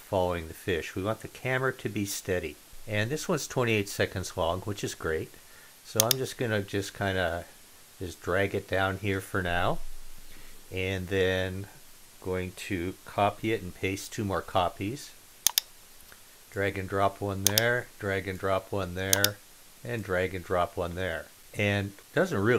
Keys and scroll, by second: 13.1 super+c, 13.7 super+v.